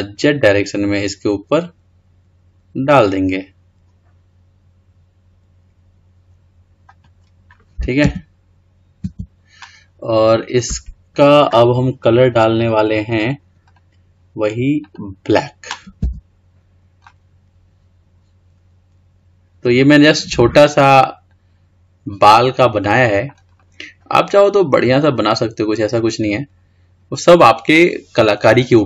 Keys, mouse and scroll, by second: 5.9 g, 8.3 Tab, 9.2 Tab, 13.8 click, 15.0-16.2 drag, 16.2 Tab, 17.2-20.3 middle drag, 20.3-21.0 scroll down 2, 21.0 scroll up 1, 21.2-22.5 scroll down 4, 22.5-23.7 middle drag, 23.7-25.7 scroll up 4, 25.7-26.4 scroll down 1, 26.4-26.8 scroll up 1, 26.8-28.7 scroll down 4, 28.7-28.8 scroll down 2.